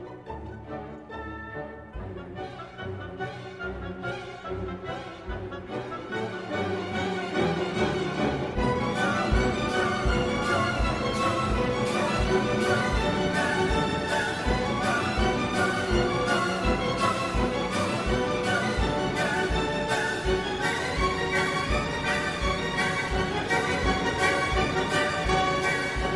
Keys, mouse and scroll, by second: 1.7 click, 2.8 click, 4.2 ctrl+click, 5.2 click, 6.0 ctrl+click, 9.0 click, 11.7 click, 12.3 right click, 14.0 click, 15.6 click, 17.4 click, 19.4-22.1 drag, 22.8 click, 24.5-26.1 drag.